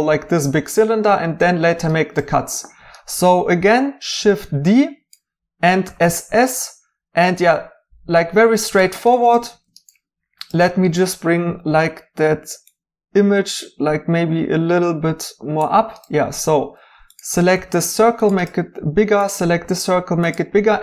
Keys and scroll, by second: 3.6 d, 5.8 typing, 11.7 g, 16.8-17.5 typing, 19.3-20.1 typing.